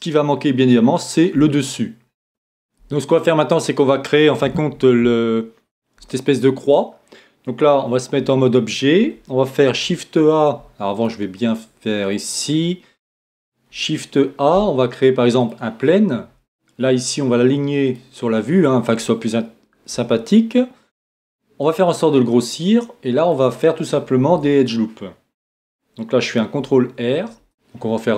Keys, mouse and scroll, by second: 2.6-8.2 middle drag, 8.2 Tab, 9.7 shift+a, 10.9-14.2 drag, 13.7 shift+a, 17.9-19.7 drag, 19.4-21.4 middle drag, 19.9 s, 21.7-25.1 drag, 24.3 Tab, 26.5 ctrl+e.